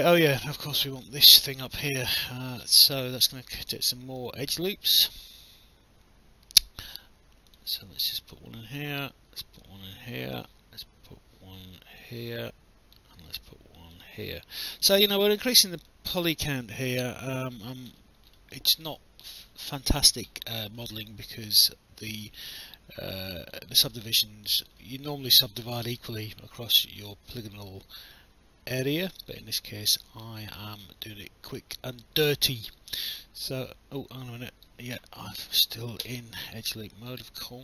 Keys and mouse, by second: 0.1 alt+middle click, 0.5 alt+click, 1.5 alt+middle click, 2.1 alt+middle click, 4.2 click, 7.5 click, 9.6 click, 12.0 click, 13.9 click, 14.8 alt+click, 16.7 alt+click, 17.2 alt+middle click, 18.5 alt+click, 22.5 alt+click, 23.9 alt+middle click, 24.6 alt+click, 26.2 alt+click, 28.8 alt+click, 32.0 alt+click, 32.8 right click, 35.4 Escape, 36.0 w, 37.1 right click.